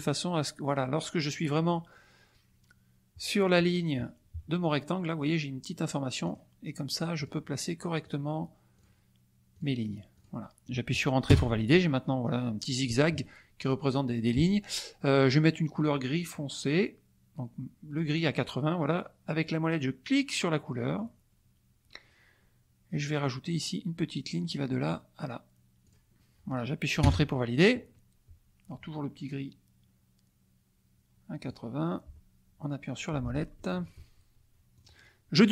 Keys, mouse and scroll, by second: 1.8 click, 6.2 click, 7.1 click, 8.0 click, 8.7 click, 9.5 click, 10.1 click, 11.3 Return, 20.9 middle click, 24.3 click, 25.8 click, 27.0 Return, 31.4 click, 33.4 ctrl+z, 33.5 ctrl+click, 34.7 click.